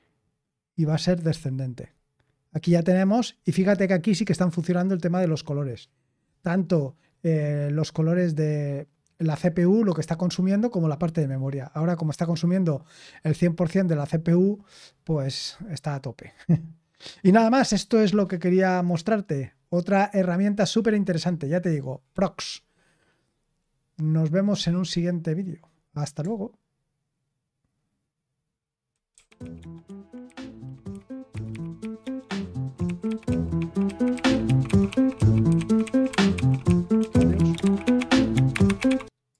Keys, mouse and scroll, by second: 1.2 d, 22.3-29.1 scroll up 1, 29.1 super+x, 39.3 click.